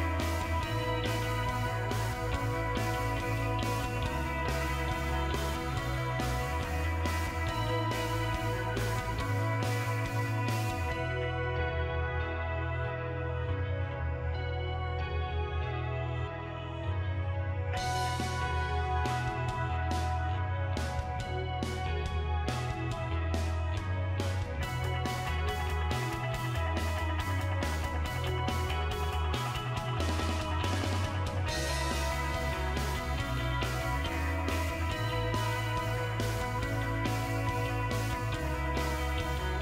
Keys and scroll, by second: 3.5-4.4 typing.